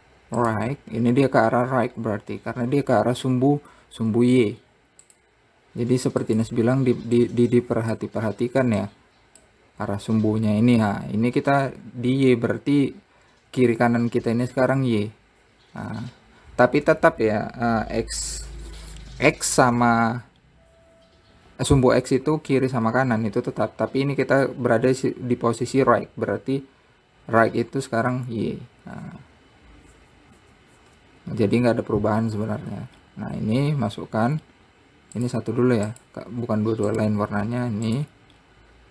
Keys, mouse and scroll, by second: 2.0-2.5 scroll up 1, 5.0 z, 6.8-7.8 drag, 9.4 shift+click, 33.3 scroll up 5, 35.7 click, 36.4 click, 37.4-38.9 drag.